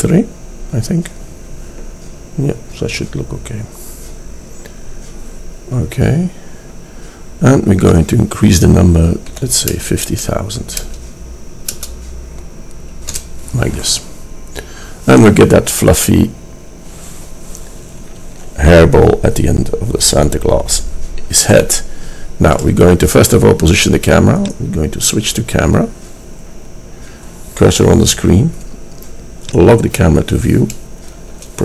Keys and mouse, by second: 7.9 click, 21.7-26.3 drag, 29.5-31.2 drag, 31.4 KP_0.